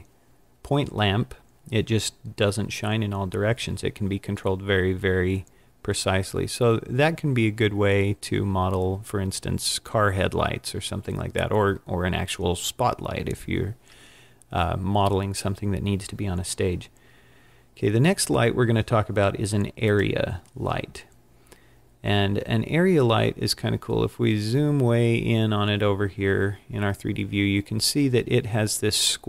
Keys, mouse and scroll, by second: 19.9 click, 23.0-23.6 scroll up 6, 24.0-26.5 scroll up 21, 26.8-27.6 scroll down 4, 28.2-29.2 scroll up 1.